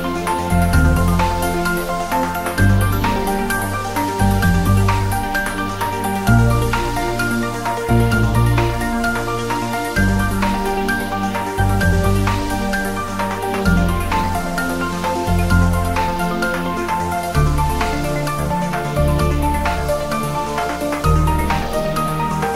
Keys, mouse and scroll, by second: 1.3 click, 2.1 scroll down 1, 3.4 click, 4.5 s, 5.2 x, 6.0 click, 6.6-6.9 scroll up 1, 6.9 s, 7.7 click, 9.4-9.8 scroll down 1, 10.1 shift+a, 11.1 click, 15.0 s, 15.3 click, 15.4 s, 16.3 click, 16.7 scroll down 1, 17.0 s, 17.4 click, 17.9 s, 18.1 click, 18.3 g, 19.3 click, 19.5 r, 20.2 click, 20.4 g, 21.0 click, 21.2 r, 21.3 click, 22.3-22.5 scroll up 1.